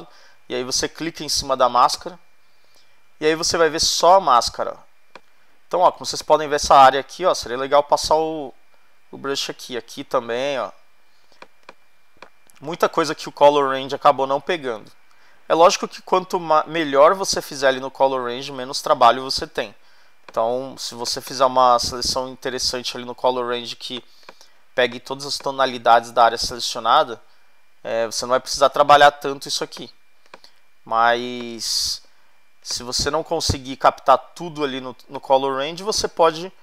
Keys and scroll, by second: 3.5 alt+space, 4.1 space, 11.4 space, 24.0 space, 29.8 space, 36.3 [.